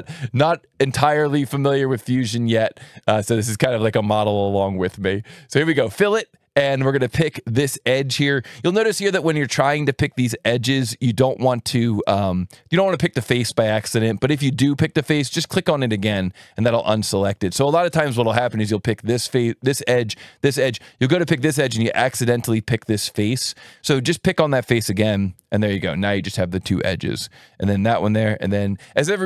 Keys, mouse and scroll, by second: 2.1 click, 4.9 click, 13.1 click, 15.3 click, 18.1 click, 19.8 click, 21.8 click, 24.9 click, 27.0 click.